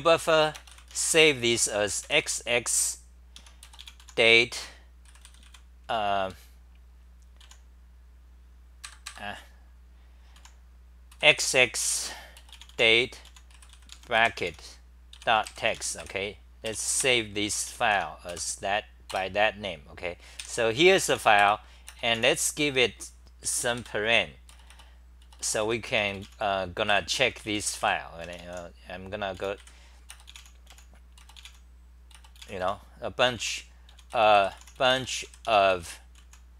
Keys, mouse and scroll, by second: 3.4 Home, 4.8-5.7 typing, 7.4 ctrl+g, 7.4 u, 8.8 ctrl+g, 9.1 ctrl+g, 10.3 u, 13.2 u, 15.7 Home, 16.0 2, 17.7 j, 17.9 End, 18.3 k, 19.2 Return, 20.8-21.6 typing, 23.4 super+=, 25.6 Home, 26.9-30.7 typing, 27.3 Home, 33.3 Home, 33.3 u, 35.5 Home, 35.6 m, 36.1 h.